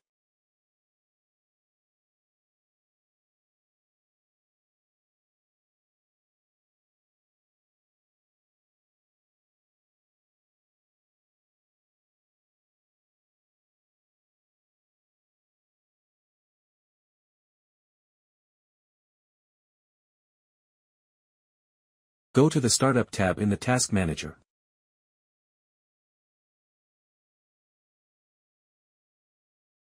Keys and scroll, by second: 0.0-6.7 typing, 1.6 Left, 1.9 Left, 3.7 Right, 6.2 Right, 7.3 ctrl+s, 8.6-9.9 typing, 10.0 ctrl+s.